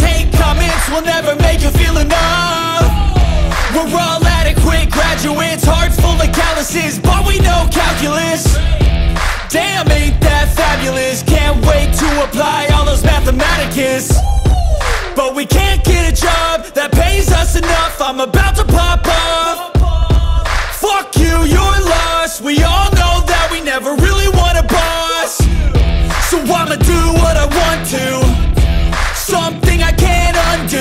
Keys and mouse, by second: 0.0 x, 1.4 click, 2.4-4.2 drag, 5.2 click, 6.1-7.6 middle drag, 7.6 click, 7.7 middle click, 8.9 click, 10.3 middle drag, 11.2 middle click, 11.3 click, 11.9 middle click, 13.5 click, 14.6 r, 15.0 y, 16.8 click, 17.9-19.4 drag, 19.4 middle click, 20.4 middle click, 21.6 middle click, 23.4-24.6 drag, 25.3 click, 26.1 s, 27.6 y, 30.2 click.